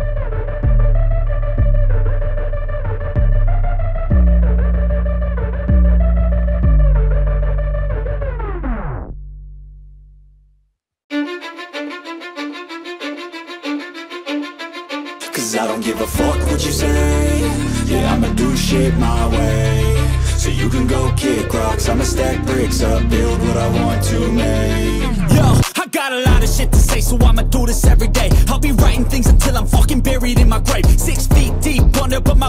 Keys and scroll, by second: 17.9 ctrl+z.